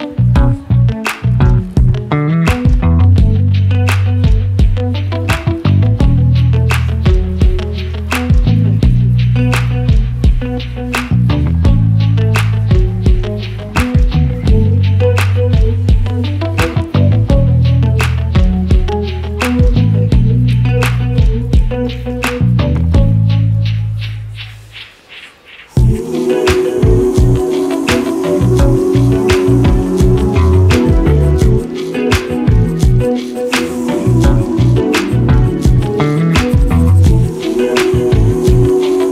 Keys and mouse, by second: 0.3 click, 2.5 g, 7.5 middle click, 8.9 middle click, 10.0-14.8 drag, 15.4-20.0 drag, 20.5 middle click, 21.6 click, 22.9 middle click, 22.9 click, 23.8-24.2 drag, 25.1 g, 29.2 middle click, 30.2 g, 33.2 drag, 33.4-34.1 middle drag, 34.6-35.2 middle drag, 36.2 g, 38.1 middle click, 38.1 click.